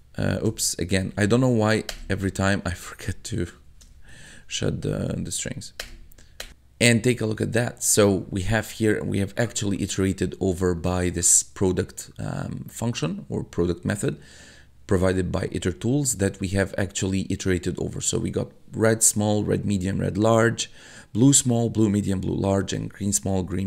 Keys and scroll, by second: 0.5 Up, 1.9 Return, 2.2 Tab, 2.6 Up, 3.5 Left, 3.9 shift+', 4.7 Right, 5.8 Return, 16.8 1.